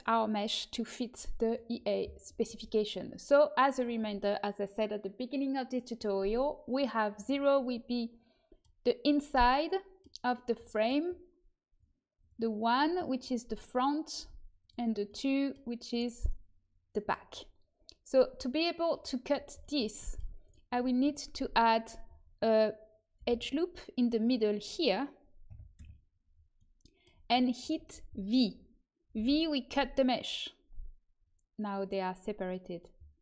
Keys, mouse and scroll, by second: 1.4-5.6 drag, 2.5 Tab, 7.0-8.7 drag, 7.6-9.2 middle drag, 11.7-16.2 drag, 13.4-15.2 right drag, 15.8 right click, 16.5 middle click, 16.7-17.9 right drag, 17.9-20.6 drag, 20.4 right click, 20.6 Tab, 23.1 ctrl+r, 29.1 v.